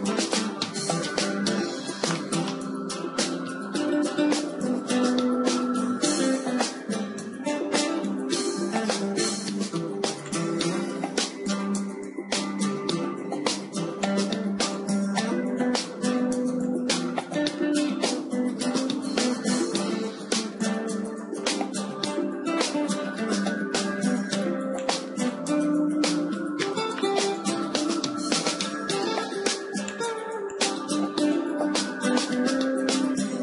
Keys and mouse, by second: 0.5 KP_1, 2.1-4.8 middle drag, 3.3 shift+d, 7.7 g, 9.3 click, 9.9-13.3 right drag, 9.9 x, 12.3 shift+a, 15.9 s, 17.5-19.5 drag, 18.1 g, 20.4-22.2 drag, 22.2 Tab, 22.4 middle click, 24.8-26.7 drag, 25.5-29.9 right drag, 28.9-29.9 middle drag, 29.9-32.8 drag.